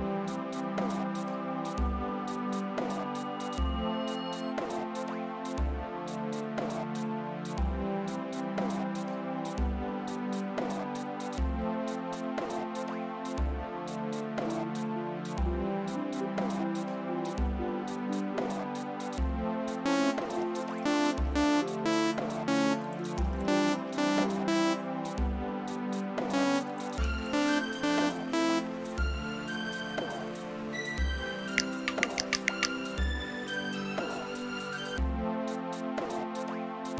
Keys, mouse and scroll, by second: 0.2-2.8 typing, 4.7 Return, 7.4-11.8 drag, 13.7 click, 14.3 space, 16.2 space, 17.1 click, 18.4 space, 19.3 click, 19.8 space, 22.1 space, 24.7 space, 25.9 click, 26.2 space, 28.6 space, 29.7 click.